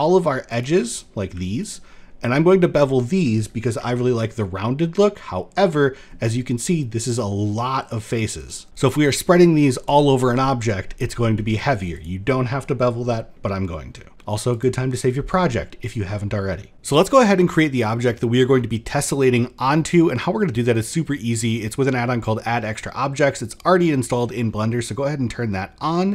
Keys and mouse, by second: 0.1 alt+shift+click, 0.5 middle click, 1.7 middle click, 2.5 shift+click, 3.4 ctrl+b, 8.6 middle click, 11.6 click, 12.7 middle drag, 13.8 middle click, 14.1 shift+middle click, 16.5 ctrl+s, 17.0 shift+a, 19.5 click, 23.3 click, 24.3 shift+a.